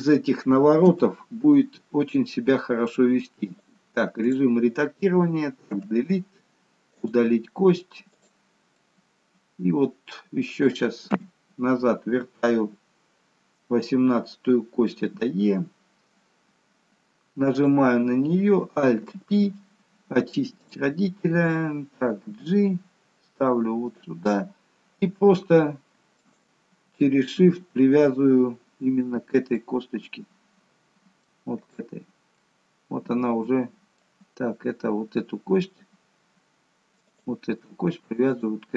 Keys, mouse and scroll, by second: 0.8 Delete, 3.6 click, 5.6 Delete, 8.0 click, 11.0 KP_3, 15.0 e, 17.5 click, 19.0 alt+p, 22.2 g, 26.1 shift+click, 28.7 scroll up 2, 29.4 middle click, 31.5 click, 32.3 middle click, 36.9 click, 38.2 shift+click.